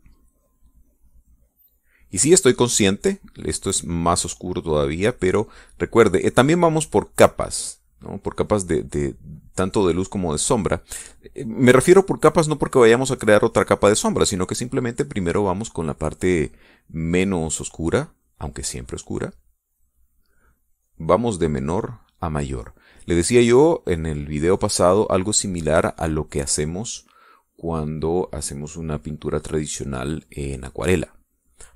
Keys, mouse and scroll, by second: 7.0-11.3 drag, 17.4-21.1 drag, 21.2-23.6 drag, 25.0-27.5 middle drag, 28.1-31.7 drag.